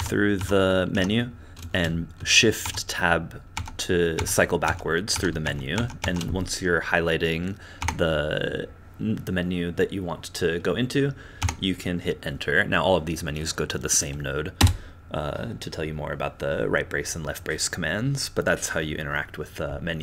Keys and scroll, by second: 0.4 Tab, 0.9 Tab, 2.6 shift+Tab, 3.5 shift+Tab, 4.1 shift+Tab, 4.6 shift+Tab, 5.1 shift+Tab, 5.4 shift+Tab, 5.7 shift+Tab, 6.0 shift+Tab, 7.8 Tab, 11.4 Tab, 14.6 Return.